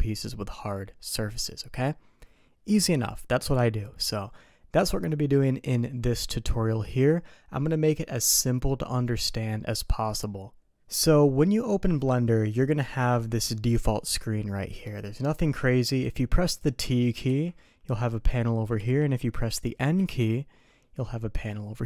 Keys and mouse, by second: 17.2 t, 18.7 t, 20.0 n.